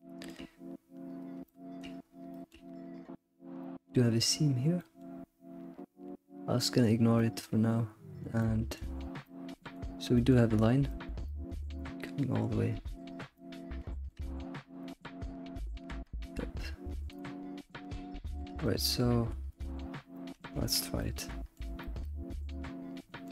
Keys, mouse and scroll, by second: 0.0-2.0 shift+middle drag, 2.0 scroll up 1, 2.3 shift+middle drag, 2.7-3.6 scroll up 1, 3.6-4.0 shift+middle drag, 4.8-7.0 middle drag, 7.1-13.1 shift+middle drag, 13.3 scroll down 2, 13.3-14.4 shift+middle drag, 14.4-14.8 scroll up 3, 14.8-17.0 shift+middle drag, 17.0-17.6 scroll down 2, 17.2-19.3 shift+middle drag, 19.1 scroll up 1, 19.6 click, 20.1-23.3 shift+middle drag.